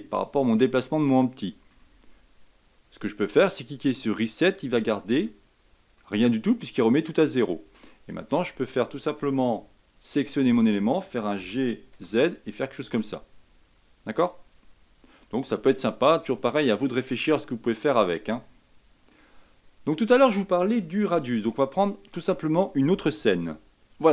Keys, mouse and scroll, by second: 1.9 Tab, 3.9-5.1 drag, 5.1 Tab, 5.9-7.6 middle drag, 7.6 Tab, 8.5 Tab, 10.0 click, 10.4 scroll down 2, 11.4 g, 16.5-17.4 middle drag, 17.4 scroll up 4, 17.9-19.4 middle drag, 19.4-20.0 scroll down 2, 20.0-23.7 middle drag, 23.9 shift+middle drag.